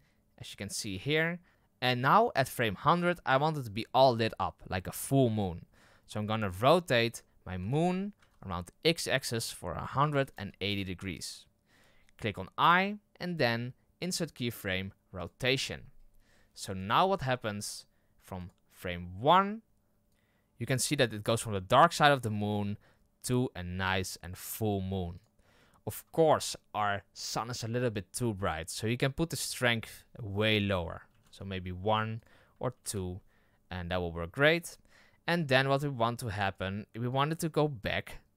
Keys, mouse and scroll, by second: 1.5-2.4 scroll down 2, 5.9-7.2 scroll down 8, 6.3 middle drag, 7.2 middle click, 7.4 r, 15.2 i, 16.7 KP_0, 18.4-23.8 drag, 25.1-38.3 drag.